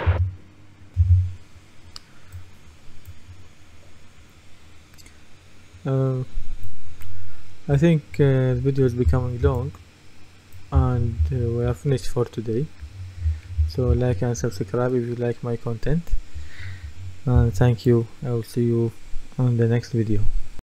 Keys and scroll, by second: 0.1 Escape, 1.0 F10, 7.8-9.5 typing, 10.5-14.5 typing, 16.4-17.4 typing.